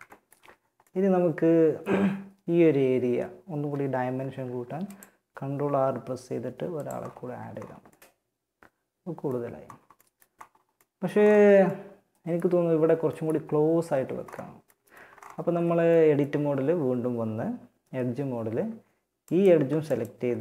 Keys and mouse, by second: 3.6 ctrl+r, 6.6 Tab, 13.2 Tab.